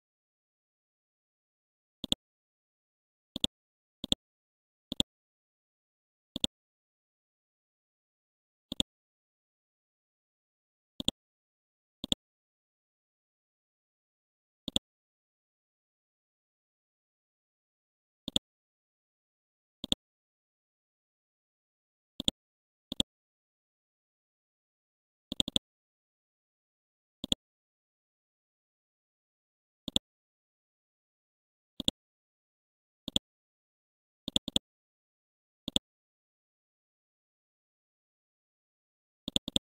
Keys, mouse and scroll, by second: 0.9 ctrl+a, 2.0 click, 6.8 scroll down 1, 7.4 scroll up 1, 8.7 click, 10.2 scroll up 1, 11.0 click, 16.4 scroll down 1, 16.9 scroll up 1, 18.3-21.5 drag, 21.8 scroll down 1, 22.2 click, 23.3 scroll up 1, 25.4 click, 28.4 KP_4, 28.6 KP_0, 28.7 Tab, 29.9 click, 30.3 scroll up 1, 30.8 scroll down 1, 31.8 click, 32.2 scroll up 1, 33.1 shift+click, 34.3-36.8 drag, 36.8 KP_4, 39.3 click.